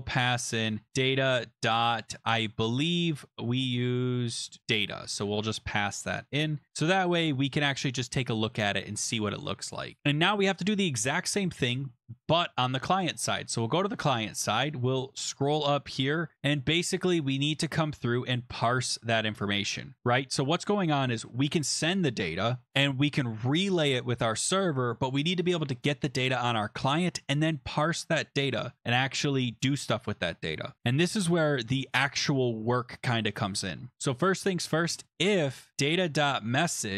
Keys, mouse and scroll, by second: 2.0-2.7 typing, 3.0 click, 4.6 click, 5.1 ctrl+c, 6.3 click, 6.7 ctrl+v, 7.8 click, 8.4 ctrl+s, 10.0 click, 10.0 scroll up 5, 13.4 click, 14.6-15.7 scroll, 15.7-16.4 scroll, 17.4 click, 18.0 Return, 18.1 Return, 18.3 BackSpace, 20.5 Return, 28.2 click, 28.9-29.9 scroll down 7, 31.9 click, 32.6 scroll, 34.6-36.9 typing, 36.2 click.